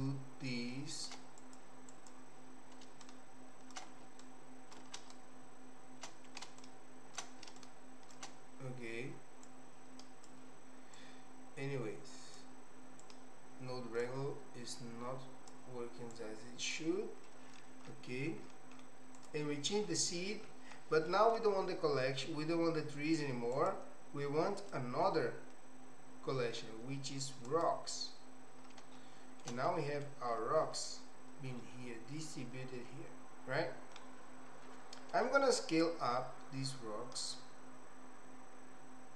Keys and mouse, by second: 1.5 click, 2.0 click, 3.1 ctrl+shift+right click, 4.3 ctrl+alt+right click, 5.1-6.3 shift+right drag, 6.7 alt+shift+right click, 7.6 ctrl+shift+right click, 9.6 click, 11.1-12.5 drag, 13.2-14.2 drag, 14.9 click, 16.3 click, 17.3 middle click, 19.2 click, 21.1 middle click, 23.7 click, 24.6-28.0 drag, 29.1 shift+middle click, 29.8 middle click, 31.7-34.0 middle drag, 35.8-39.1 shift+drag.